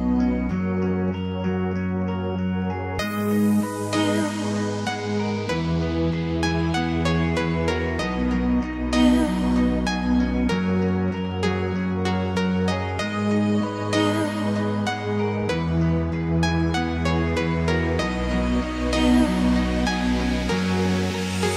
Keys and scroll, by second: 14.0 Escape, 16.3 o.